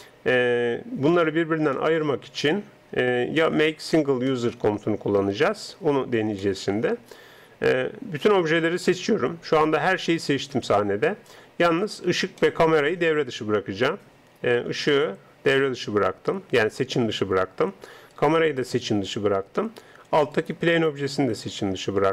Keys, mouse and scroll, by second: 0.2 Tab, 2.0-4.4 middle drag, 4.9-8.3 middle drag, 8.3 a, 9.0 a, 12.4-14.9 middle drag, 14.9 right click.